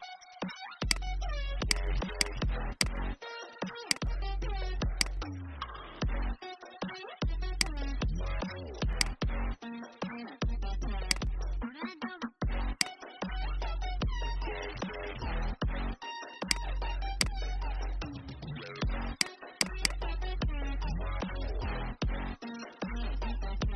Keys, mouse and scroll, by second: 0.7 click, 3.7 shift+click, 4.9-6.8 drag, 7.4-10.9 shift+drag, 11.8 alt+scroll up 1, 12.7 click, 15.5-16.3 alt+scroll down 1, 16.3 click, 17.1 alt+click, 19.0 click, 20.8-23.2 typing.